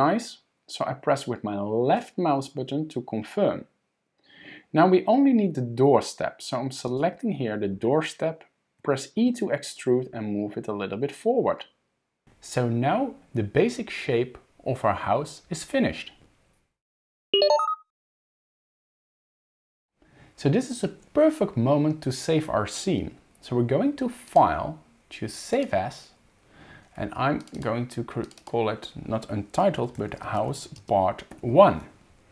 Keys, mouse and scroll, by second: 6.9 click, 8.8 e, 24.3 click.